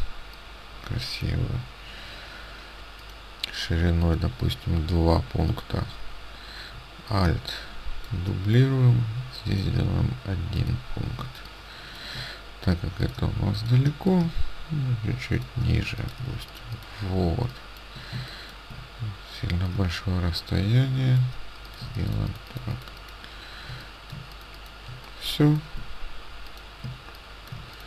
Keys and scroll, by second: 11.3 ctrl+space, 16.3 ctrl+space, 18.2 ctrl+space, 21.9 ctrl+space, 26.9 space.